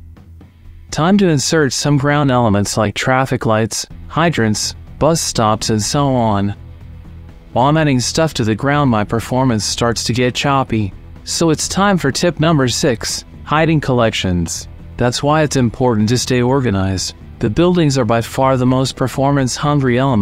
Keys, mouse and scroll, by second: 0.0 middle click, 0.3 middle click, 0.8 alt+g, 0.9 middle click, 1.3 r, 1.3 z, 1.4 KP_9, 1.4 KP_0, 1.5 KP_Enter, 2.8 alt+g, 3.3 Delete, 3.6-4.4 typing, 3.7 KP_Enter, 3.8 alt+g, 4.1 click, 4.5 Return, 4.8 shift+middle click, 4.9 click, 5.0 Delete, 5.2 click, 5.7 click, 5.9 shift+middle click, 6.2 alt+g, 6.3 click, 6.5 click, 7.3 shift+middle click, 7.5 alt+d, 7.5 x, 7.7 click, 8.1 shift+middle click, 8.6 alt+d, 8.6-9.0 typing, 8.8 click, 9.0 KP_Enter, 9.1 click, 9.3 middle click, 9.3 shift+click, 9.4 shift+click, 10.1 click, 10.6 click, 11.1 click, 11.4 ctrl+s, 11.8 typing, 11.9 KP_Enter, 11.9 click, 12.6-13.8 drag, 14.1 shift+middle click, 14.3 click, 14.6 click, 14.8-16.8 typing, 15.6 click, 15.8 KP_Enter, 16.2 scroll up 2, 16.4 shift+middle click, 16.8 middle click, 17.1 click, 17.9 shift+middle click, 18.3 r, 18.3 z, 18.3 KP_9, 18.4 KP_Enter, 18.5 click, 18.7 click, 18.8 shift+click, 19.0 alt+d, 19.3 shift+middle click, 19.5 shift+middle click, 19.6 n.